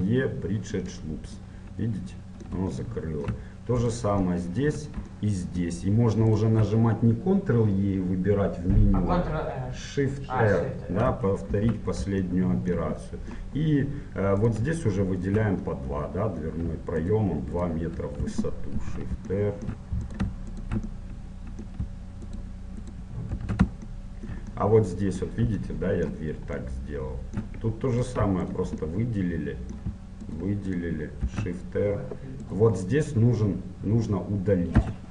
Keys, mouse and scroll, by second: 1.5-2.8 middle drag, 3.9-5.9 right drag, 4.1 middle click, 4.8 click, 5.7 middle click, 6.4 click, 6.4-8.3 right drag, 11.5 shift+r, 12.3-14.5 middle drag, 14.5 right click, 15.8-17.7 middle drag, 16.9-19.3 right drag, 18.8 shift+r, 19.3-22.1 middle drag, 20.2-24.8 right drag, 22.3 middle click, 23.4 shift+r, 23.9-28.1 middle drag, 28.1-29.1 right drag, 29.1-30.7 middle drag, 29.3-30.7 drag, 30.7-34.3 right drag, 31.3 shift+r, 34.9 x.